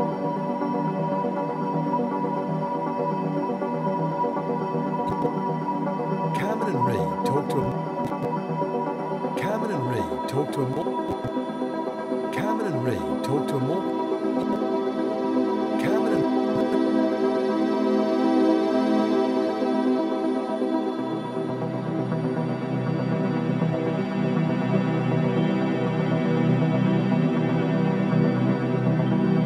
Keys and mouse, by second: 1.1 click, 1.9 click, 2.4 click, 3.2-4.0 typing, 5.1 click, 5.6 space, 7.5 space, 8.0 click, 8.5 space, 10.6 space, 11.1 click, 14.4 click, 14.4-15.6 typing, 16.5 click, 17.4 ctrl+alt+click, 17.8 alt+shift+click, 18.2 ctrl+alt+drag, 18.7 click, 19.9-29.4 drag.